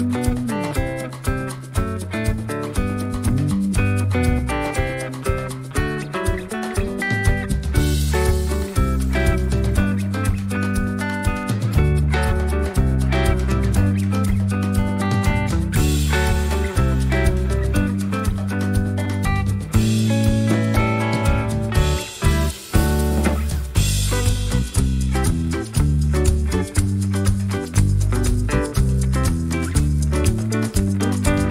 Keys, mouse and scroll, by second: 0.1 click, 1.0 Delete, 1.6 ctrl+z, 2.2-2.7 ctrl+scroll up 2, 4.5 click, 5.3-5.6 ctrl+scroll down 2, 6.5 click, 7.7 click, 8.5 Delete, 10.0 click, 10.6 middle click, 10.7 click, 11.0-13.3 drag, 14.2 click, 14.9-15.5 ctrl+scroll down 2, 15.9 ctrl+scroll up 2, 16.5-18.4 ctrl+drag, 18.6 ctrl+scroll up 2, 19.1 ctrl+click, 19.6 ctrl+click, 20.6-21.7 ctrl+drag, 22.3 click, 22.8 ctrl+click, 23.2-23.5 ctrl+scroll down 2, 26.4 click, 26.9 click, 27.8 click, 28.9 d, 29.2 click, 30.5 click, 30.9 click.